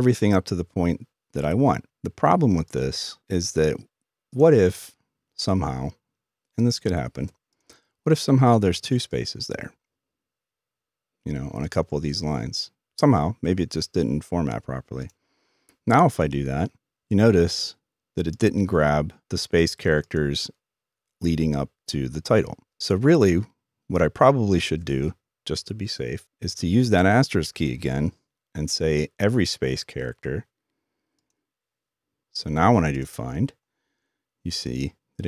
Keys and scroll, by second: 26.9 typing.